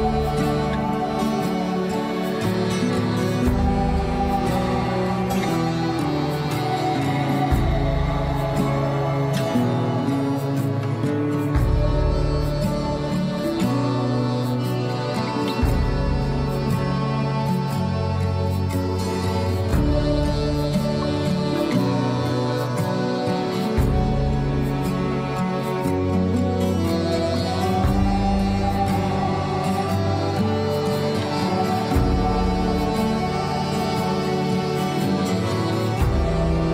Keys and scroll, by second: 24.2 F4, 34.7 ctrl+a, 35.2 F4.